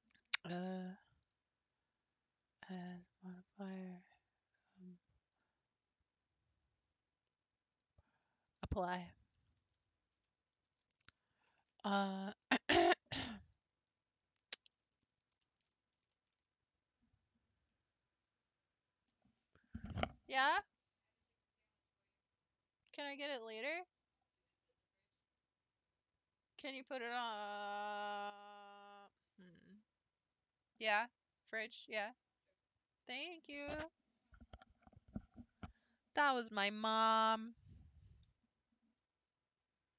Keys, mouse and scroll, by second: 8.6-9.8 drag, 9.8 Tab, 11.0 a, 13.8 click, 14.7-15.3 scroll down 5, 15.4 shift+middle click, 15.7-16.1 scroll down 1, 16.1 shift+middle click, 16.6 scroll up 1, 39.4 click.